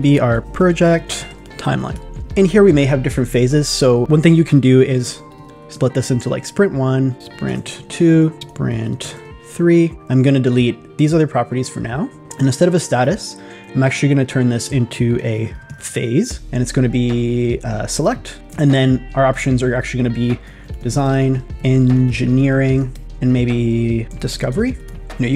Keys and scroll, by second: 0.7 shift+p, 3.3 super+a, 5.0 shift+s, 7.2 shift+s, 8.5 shift+s, 15.4 shift+p, 20.7 shift+d, 21.5 shift+e, 24.4 shift+d.